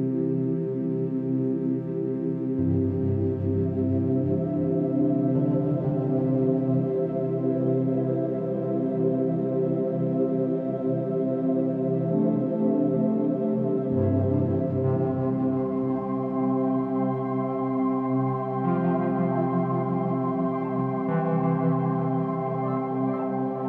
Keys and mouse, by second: 0.5-2.1 typing, 2.1 click, 2.7 click, 3.3-5.1 drag, 3.8-5.0 typing, 5.3 alt+click, 6.0 ctrl+alt+click, 6.3-7.1 typing, 6.6-8.8 ctrl+alt+drag, 8.6-10.3 typing, 13.4 ctrl+l, 14.8 Down, 15.0 Down, 16.2 Return, 19.9 click, 21.9 0, 23.1-23.6 ctrl+alt+drag.